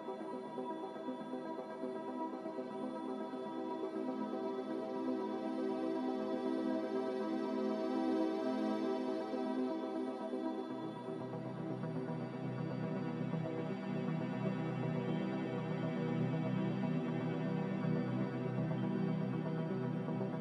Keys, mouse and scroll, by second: 12.3-13.3 typing, 13.4 Return.